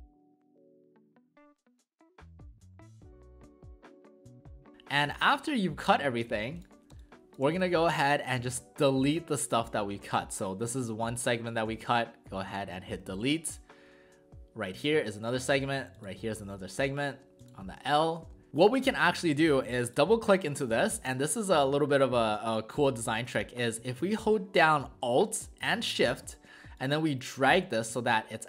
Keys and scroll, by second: 0.6 space, 1.6 space, 2.9 space, 3.6 space, 4.6 v.